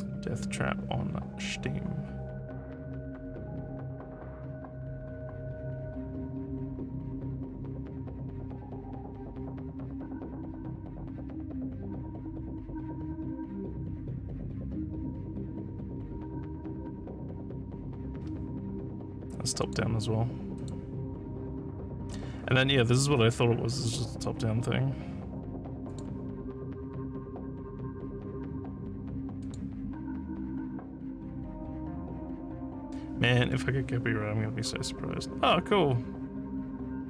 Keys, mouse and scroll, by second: 15.8 scroll down 1, 18.1 scroll down 1, 18.2 scroll up 1, 19.6 click, 20.5 click, 24.6 scroll up 1, 25.9 click, 29.4 click.